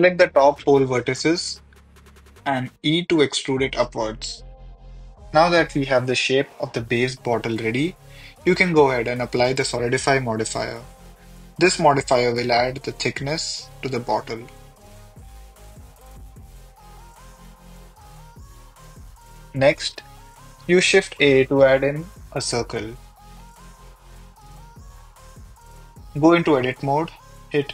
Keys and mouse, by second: 0.3 Tab, 1.3 e, 1.4 z, 3.2 click, 3.4 e, 3.5 z, 4.2-7.3 drag, 8.6 click, 9.6-11.0 drag, 11.4 click, 11.8 click, 12.5 click, 14.0 click, 15.0 click, 19.2 middle drag, 20.5 shift+a, 22.8-26.0 typing, 24.0 click, 24.6 middle drag, 27.3 KP_1.